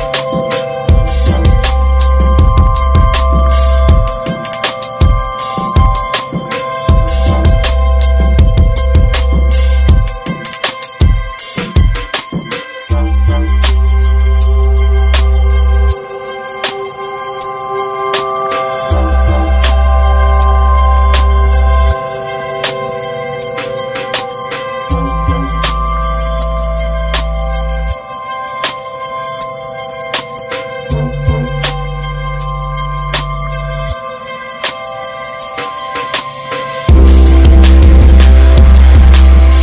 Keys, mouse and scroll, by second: 3.1 Tab, 3.3 drag, 3.5 scroll down 2, 3.7-5.0 middle drag, 5.0 ctrl+s, 5.2 scroll down 5, 5.5 middle click, 5.6-6.1 scroll up 5, 5.8 Tab, 6.4 middle click, 7.0 alt+z, 7.3 shift+middle click, 7.5-8.1 shift+scroll up 2, 8.1 click, 8.9 alt+z, 9.1 middle drag, 9.4 Tab, 9.6 scroll down 5, 10.2-10.7 middle drag, 10.7 ctrl+s, 10.8 click, 11.0 scroll down 5, 11.2-12.9 shift+middle drag, 12.9-13.4 scroll up 7, 13.1 Tab, 13.8 s, 15.0 Tab, 15.0 click, 15.2 scroll down 6, 15.4-15.8 middle drag, 15.8 ctrl+s, 15.9 scroll down 4, 16.1 middle click, 16.5-17.9 scroll up 1, 17.9 ctrl+s, 18.2 middle click, 18.3 scroll up 1, 18.4 ctrl+s, 19.1 click, 19.4 shift+middle click, 19.6 scroll up 1, 19.7 Tab, 20.0 shift+middle click, 20.2 shift+scroll up 2, 21.1 3, 21.2 click, 21.7 shift+click, 22.7 alt+shift+click, 23.1-23.7 middle drag, 23.7 shift+d, 24.5 scroll up 2, 24.8 shift+middle click, 25.4 e, 27.8 Tab, 28.2 Tab, 28.3 middle click, 28.8 ctrl+r, 29.2 middle click, 29.6 s, 30.8 middle click, 31.3 click, 32.8 s, 33.8 middle click, 34.7 ctrl+b, 36.9 Tab, 37.1 click, 37.2 right click, 37.6 drag, 37.8 scroll down 5, 38.0-38.6 middle drag, 38.6 ctrl+s, 38.8 ctrl+s, 38.9 click, 39.3 ctrl+a.